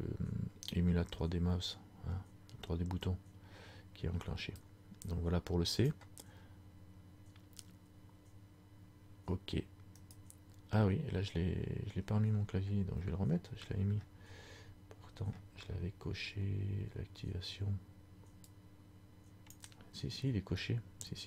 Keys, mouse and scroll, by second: 12.5 scroll down 2, 18.6 click, 18.6-19.0 scroll down 32.